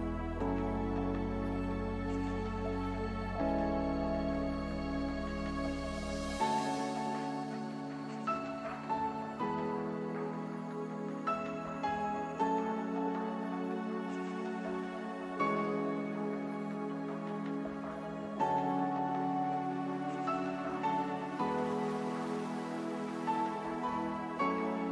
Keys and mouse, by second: 2.8 shift+a, 4.6 Tab, 5.3 w, 8.0-9.5 drag, 9.5 Tab, 10.0 Tab, 10.8 w, 14.2-20.2 drag, 14.6-17.0 typing, 17.5 Tab, 19.6 ctrl+1, 21.0-24.6 drag, 24.6 shift+d.